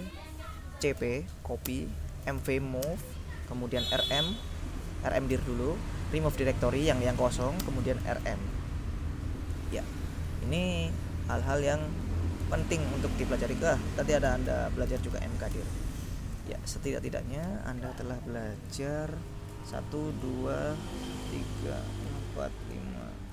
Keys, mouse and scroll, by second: 0.0-6.1 typing, 7.7-8.8 typing, 10.6 BackSpace, 12.5 BackSpace, 14.1-16.3 typing, 18.8 click, 19.8-20.8 drag, 21.2 click, 22.0 click, 22.9 click.